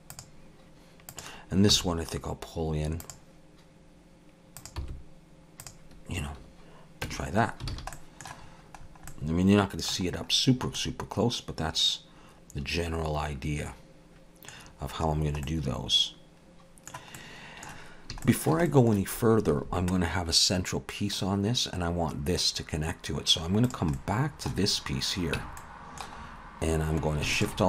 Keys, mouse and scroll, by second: 1.1 click, 1.7 g, 4.6 click, 4.8 g, 7.1 Tab, 7.5 scroll down 2, 7.7 alt+a, 7.9 middle click, 8.4-9.1 scroll down 5, 9.1 middle click, 10.1-10.7 scroll up 6, 10.8 middle click, 14.6-15.4 scroll down 5, 15.4 middle click, 16.5 middle click, 17.2 middle click, 18.5 shift+middle click, 18.7 shift+middle click, 23.7 click, 24.0 middle click, 24.7-25.4 scroll up 2, 25.4 Tab, 25.6 middle click, 26.2-26.8 scroll up 2, 27.0 scroll up 1, 27.4 alt+shift+click.